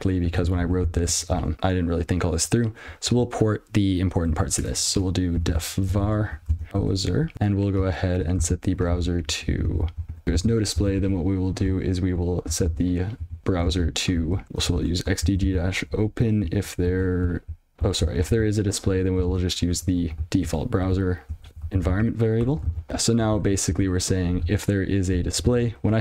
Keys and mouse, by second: 0.0 ctrl+y, 1.6 ctrl+p, 2.6-3.5 ctrl+f, 5.2-8.4 typing, 8.9 ctrl+n, 10.2 ", 10.5 alt+j, 11.4 ctrl+a, 12.5 ctrl+b, 13.1 ctrl+p, 13.9 ctrl+b, 14.4 ctrl+f, 15.1 alt+j, 15.3 ctrl+n, 17.3 ctrl+f, 19.3 ctrl+alt+space, 20.3 ctrl+p, 21.3 ctrl+f, 22.3 ctrl+alt+space, 23.9 ctrl+f, 24.9 ctrl+p, 25.9 ctrl+alt+f.